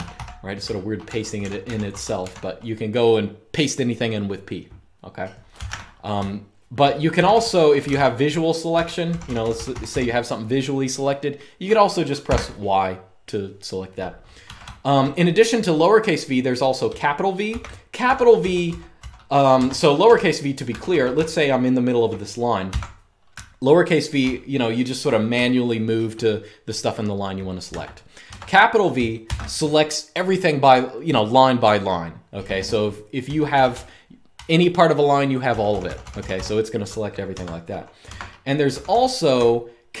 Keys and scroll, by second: 0.0-3.3 typing, 5.3-9.3 typing, 12.0 y, 14.2-14.9 typing, 17.2-25.4 typing, 19.4 Escape, 27.5-29.0 typing, 33.0-33.4 typing, 36.9-40.0 typing, 37.9 Escape.